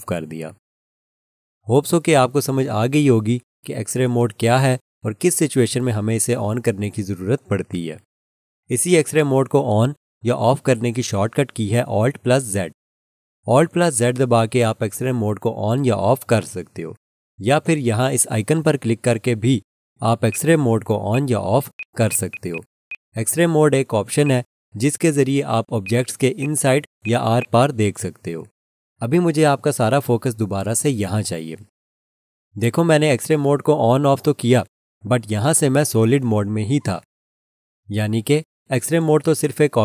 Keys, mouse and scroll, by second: 13.1 alt+z, 14.2 alt+z, 15.1 alt+z, 15.9 alt+z, 16.9 alt+z, 18.6 alt+z, 20.3 click, 22.1 double click, 24.3 click, 27.4 double click.